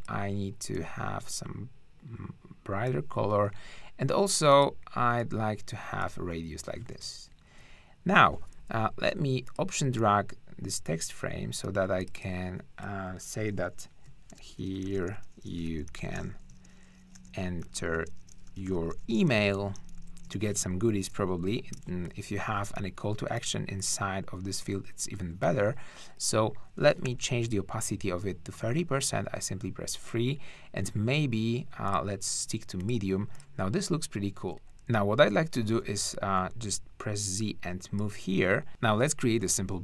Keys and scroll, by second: 7.3 shift+Up, 7.9 shift+Down, 14.1-21.2 typing, 21.7 super+Return, 27.0 3, 34.3 shift+`, 35.8 z, 39.4 r.